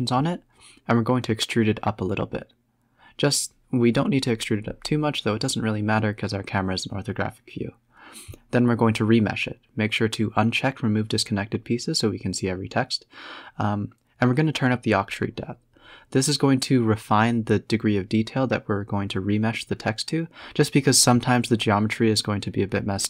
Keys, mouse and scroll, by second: 0.0 Tab, 0.6 e, 1.4 Tab, 1.7-2.4 middle drag, 2.4 Tab, 2.7 g, 3.6 Tab, 3.7-4.2 scroll up 6, 4.2-5.3 middle drag, 5.3 click, 5.9 click, 8.9 middle drag, 9.1 scroll down 4, 10.0 click, 11.0-12.1 drag, 12.3 middle drag, 12.5-12.9 scroll down 4, 13.1-13.8 middle drag, 13.7 KP_0, 14.3 scroll up 4, 15.9 Tab, 16.3 Tab, 17.0 click, 17.7 scroll down 4, 18.6-19.9 scroll up 3, 21.4 click.